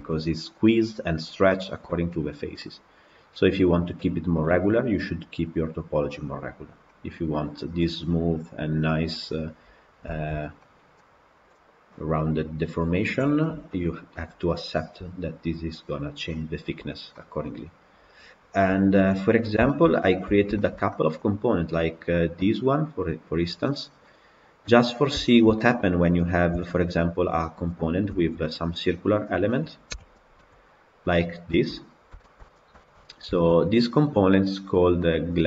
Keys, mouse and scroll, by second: 6.5 scroll down 1, 6.8-10.3 middle drag, 10.3 scroll down 2, 10.5-13.9 middle drag, 13.9 scroll up 2, 16.7 scroll down 2, 17.0-19.3 middle drag, 19.3-20.4 scroll down 5, 19.5 shift+middle drag, 20.4-21.7 shift+middle drag, 21.7 click, 23.5-24.7 middle drag, 24.7-25.2 scroll up 1, 25.2-26.4 shift+middle drag, 26.4 KP_Decimal, 27.1 scroll down 2, 27.3-28.0 middle drag, 28.0 Tab, 29.8 alt+h, 30.2-31.4 middle drag, 31.4 Tab, 31.7-32.1 scroll down 5, 32.1-35.4 shift+middle drag.